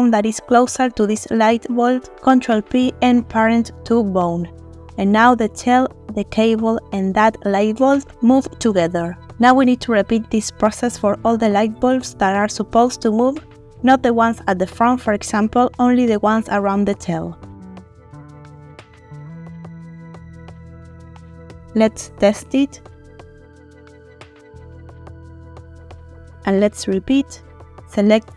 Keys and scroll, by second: 1.8 ctrl+p, 6.1 ctrl+r, 7.8 Escape, 19.5 ctrl+p, 22.1 r, 24.9 Escape.